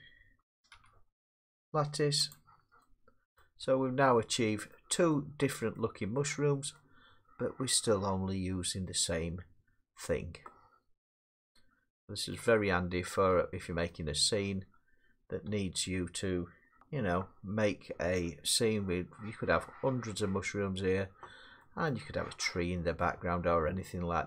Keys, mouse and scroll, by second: 0.7 z, 2.3 click, 2.8 middle click, 3.4 middle click, 3.7 Tab, 4.7 middle click, 5.8 middle click, 6.8 middle click, 12.3 middle click, 13.0-13.8 scroll, 13.9 middle click, 15.5 Tab, 16.8 click, 16.8 g, 18.2 middle click, 18.2 scroll, 21.6-21.9 scroll, 21.9 middle click, 23.8 middle click.